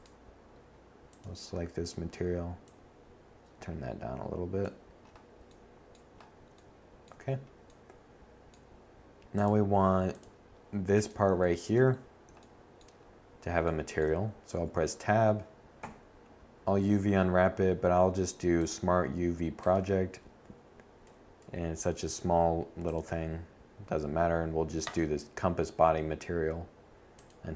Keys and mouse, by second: 6.7 click, 8.3-9.0 middle drag, 9.4 middle click, 11.9 Tab, 13.1 u, 25.4 Tab, 26.4 Tab, 27.4 u.